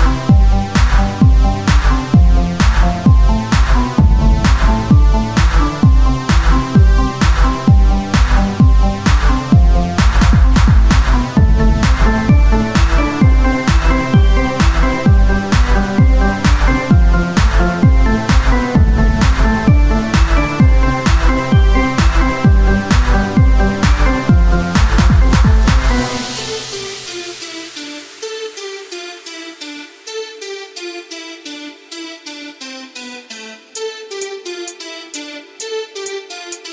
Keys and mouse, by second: 7.9 KP_1, 8.8 e, 12.4 s, 14.5-16.6 drag, 14.6 r, 16.6 s, 18.5 e, 20.4 click, 20.9 r, 21.5 s, 23.9 e, 25.2 s, 28.8 r, 32.6 f.